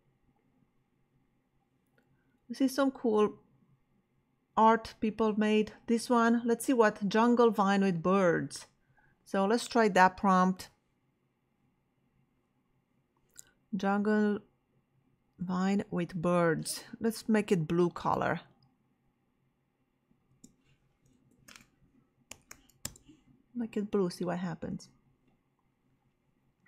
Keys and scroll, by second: 20.3 space, 21.1 b, 21.5 l, 22.3 u, 22.8 Return.